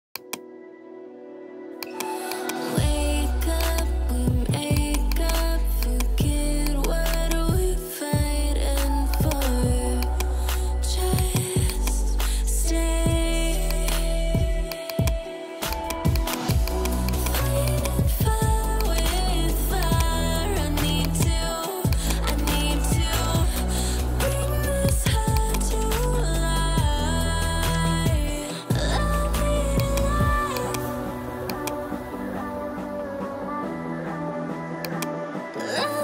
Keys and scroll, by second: 5.4 ], 6.2 [, 8.5 [.